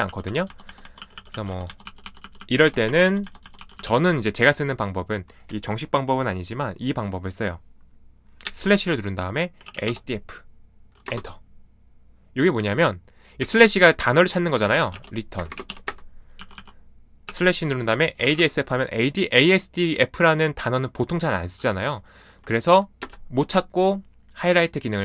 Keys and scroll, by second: 0.0-4.3 typing, 8.4-10.3 typing, 11.0 Return, 13.4-18.8 typing, 19.8 typing, 23.0 Return.